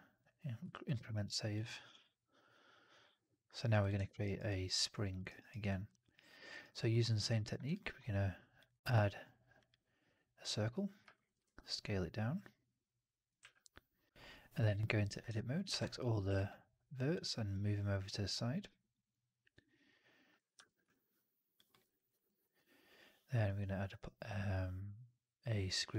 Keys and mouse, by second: 0.6 alt+drag, 0.9 middle drag, 1.0 right drag, 1.2 drag, 3.7 click, 3.9 alt+middle drag, 4.1 alt+right click, 4.4-5.0 alt+drag, 5.1 alt+right drag, 5.4 alt+right drag, 5.6-6.3 alt+drag, 6.4 alt+right drag, 6.5 alt+click, 6.8 alt+middle click, 6.9 alt+right drag, 7.2 alt+click, 7.5-10.9 drag, 11.0 alt+right drag, 13.3 w, 14.5 1, 15.6 ctrl+a, 16.1 w, 18.6-20.2 drag, 20.4 4, 20.8-21.4 alt+drag, 21.6 middle drag, 21.7 right drag, 22.0 right click, 22.1 click, 23.4-25.8 drag.